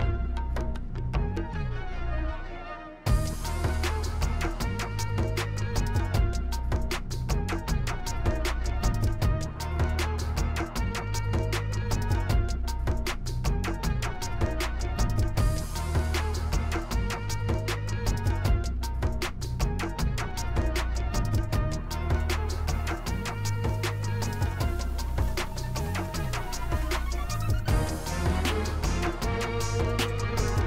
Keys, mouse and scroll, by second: 3.0-5.1 drag, 8.9 click, 11.0 click, 11.8 KP_0, 12.1 KP_1, 12.4 Return, 15.9 click, 17.4 click, 18.3 KP_0, 18.5 KP_1, 18.8 Return, 23.2 click, 27.2 click, 28.1 click, 30.1 click.